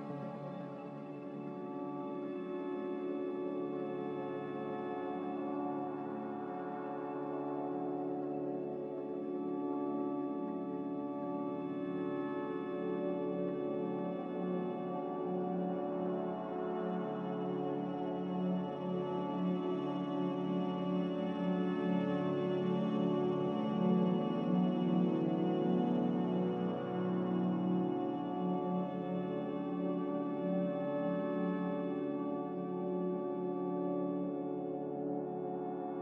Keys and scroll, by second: 15.0 x, 18.7 a, 20.6 s, 24.1 a, 27.0 a, 31.6 ctrl+c.